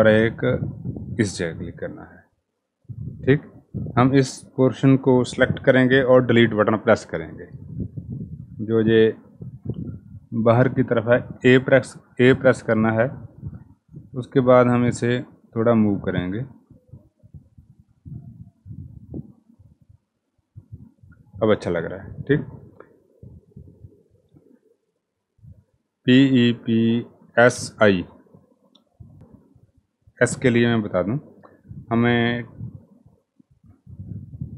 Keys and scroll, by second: 5.6 Delete, 11.0 a.